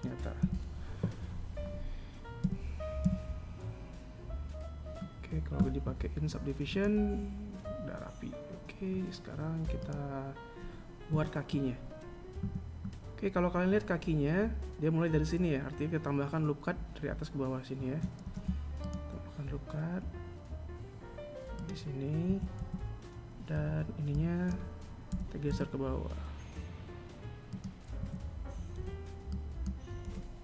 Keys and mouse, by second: 0.1 a, 2.1 Tab, 2.7 z, 6.4 click, 9.5 click, 10.8 KP_1, 12.2 Tab, 17.9 r, 21.9 a, 22.2 z, 23.2 b, 27.6 a, 28.4 b.